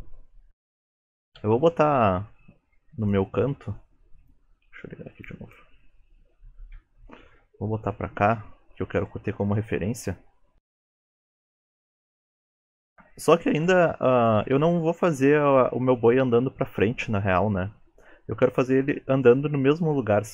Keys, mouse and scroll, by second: 6.7 KP_3, 8.4 KP_1, 9.4 g, 10.8 KP_3, 12.6 click, 14.3 space.